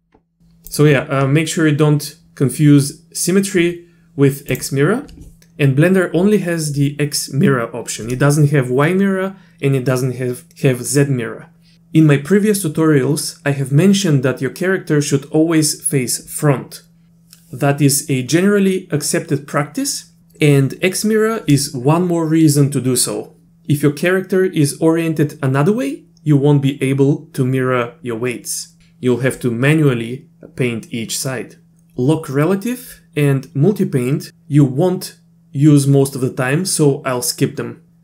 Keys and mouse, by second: 0.7 click, 4.5 click.